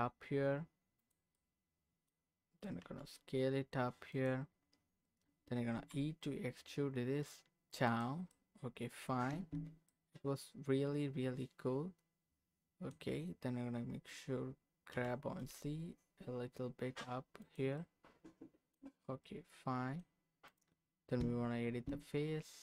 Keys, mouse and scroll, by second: 1.0 click, 1.3 middle click, 2.8 s, 4.1 click, 5.7 e, 7.9 click, 8.3 middle click, 9.3 Tab, 9.9-12.9 middle drag, 14.9 g, 15.4 x, 15.4 z, 17.4 click, 17.8 middle click, 19.2 middle click, 20.4 click, 21.2 Tab.